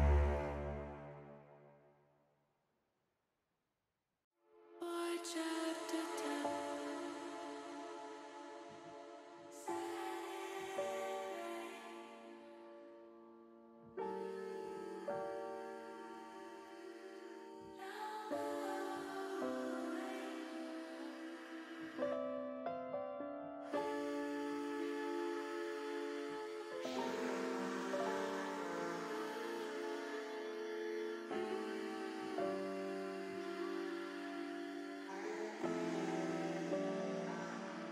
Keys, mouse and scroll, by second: 0.8 click, 2.2 middle click, 3.1 l, 4.1 click, 5.1 alt+shift+click, 6.5 ctrl+KP_Add, 6.7 ctrl+KP_Add, 6.9 ctrl+KP_Add, 7.0 ctrl+KP_Add, 7.1 ctrl+KP_Add, 7.5 ctrl+KP_Add, 7.6 ctrl+KP_Add, 8.4 ctrl+KP_Add, 8.9 ctrl+KP_Add, 9.9 ctrl+KP_Subtract, 10.8 middle click, 12.3 middle click, 13.5-14.6 drag, 15.4 KP_1.